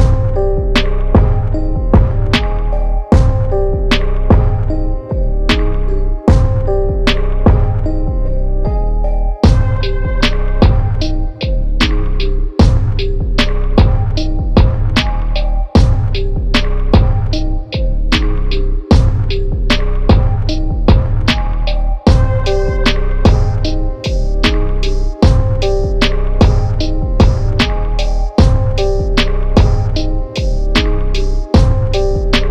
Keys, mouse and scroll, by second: 1.4 Tab, 3.2 typing, 3.5 click, 4.5 Tab, 6.4 shift+Tab, 8.4 click, 12.3 click, 17.6-20.4 drag, 22.7 click, 24.9 click, 31.0 click, 32.0-32.5 typing.